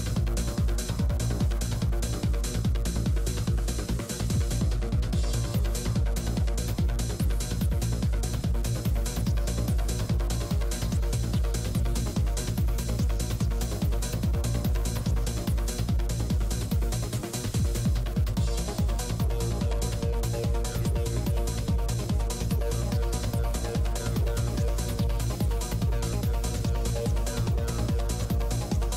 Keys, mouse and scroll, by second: 2.4-4.9 typing, 5.9 scroll down 1, 6.4 click, 6.4 middle click, 7.7 f, 8.5-9.7 drag, 9.0 right click, 9.7 KP_Decimal, 10.5 shift+f, 11.4 click, 11.9 shift+f, 12.9 click, 12.9 f, 13.7 middle click, 15.1 middle click, 15.6 g, 15.6 f, 16.3 f, 16.7-21.2 drag, 16.7 f, 18.2 f, 19.5 f, 20.4 f, 20.6 f, 20.9 middle click, 21.5 f, 21.7 click, 23.0-25.9 typing, 23.3-24.6 drag, 25.1-28.9 drag, 27.2 f.